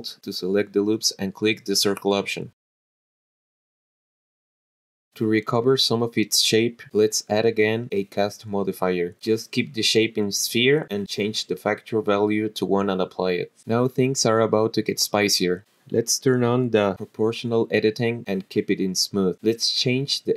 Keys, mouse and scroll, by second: 0.5 click, 1.6 click, 2.2 click, 3.0 alt+shift+click, 3.8 click, 4.3 middle click, 5.2 alt+shift+click, 6.7 click, 8.5 click, 10.0-10.8 drag, 11.8 click, 13.9 click, 16.1 click, 18.3 click, 18.8-20.1 drag.